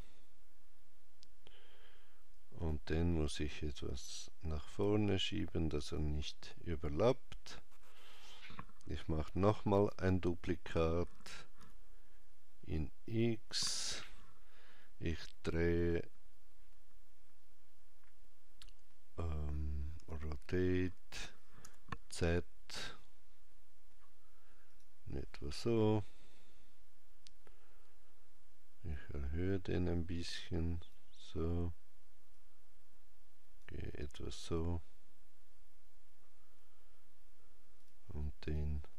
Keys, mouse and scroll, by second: 2.4 click, 9.6 shift+d, 19.8 r, 28.7 click, 32.1 click, 37.6 click, 38.3 click.